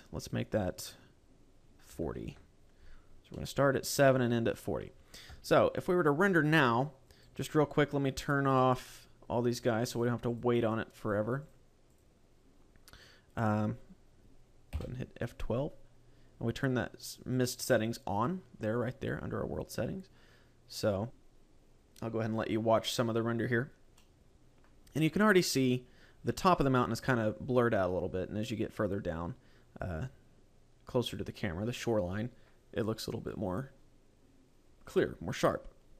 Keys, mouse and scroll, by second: 0.0 click, 3.2 middle click, 5.1 KP_0, 6.2 scroll up 3, 7.0 right click, 8.2 click, 9.8 click, 10.1 click, 10.4 click, 10.8 click, 11.2 click, 11.8 click.